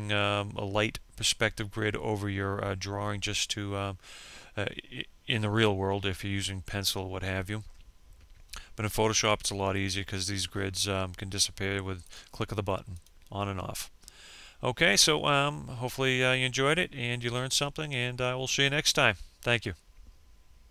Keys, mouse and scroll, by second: 9.2 click.